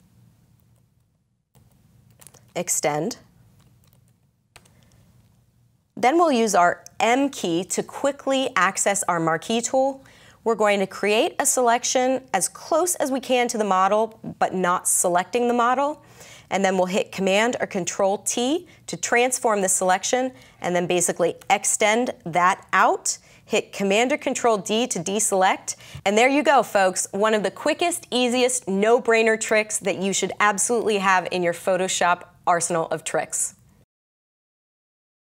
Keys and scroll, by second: 0.0-4.5 typing, 4.5 Return, 7.0 m, 17.5 super+t, 21.3 Return, 23.8 super+d.